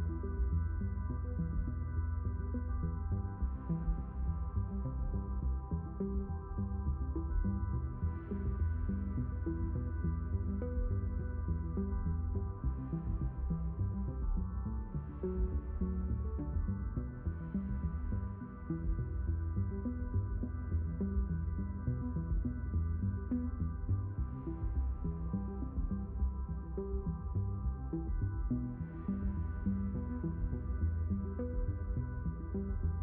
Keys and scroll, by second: 28.1 b.